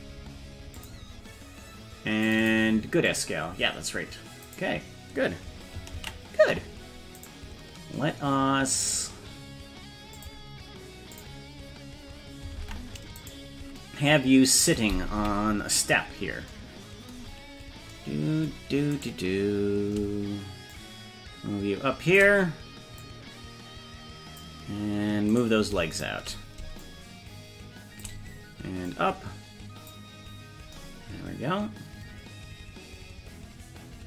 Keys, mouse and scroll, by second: 0.8 click, 2.3-4.6 drag, 6.2 ctrl+s, 7.3 right click, 10.2 click, 11.2 click, 12.7 ctrl+Tab, 13.3 right click, 15.2 KP_Decimal, 15.9-16.5 scroll down 8, 19.0 right click, 20.7-22.4 shift+drag, 23.0-24.5 drag, 25.4 right click, 26.0 shift+right click, 26.9-28.2 shift+drag, 28.9-30.0 drag.